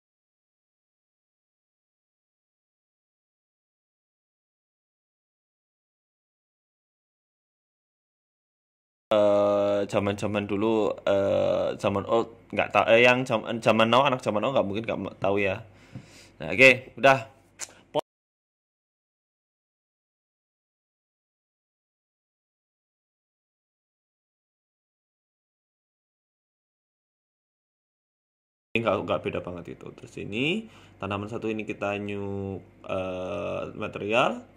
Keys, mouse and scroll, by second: 0.2 click, 4.2 click, 6.5 click, 9.5 click, 10.7-11.4 scroll up 3, 11.1 shift+middle click, 11.4 right click, 12.2 click, 12.4 click, 14.4 click, 16.3 right click, 16.7 Tab, 17.7 click, 17.9 click, 21.8 click, 24.6-25.5 scroll up 4, 24.8 Tab, 25.3 a, 25.5 a, 26.3 l, 27.5 l, 28.9 click, 29.5 click, 31.2 click.